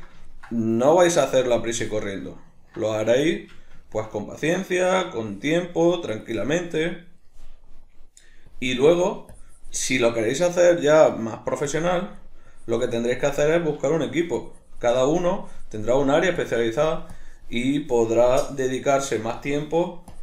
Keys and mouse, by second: 0.2-1.1 ctrl+middle drag, 1.1-2.2 drag, 2.2-5.2 middle drag, 5.2-6.7 drag, 6.7-8.5 middle drag, 8.5-10.6 drag, 10.6-11.7 shift+middle drag, 11.7-13.9 drag, 13.9-14.4 shift+middle drag, 14.4-20.2 drag.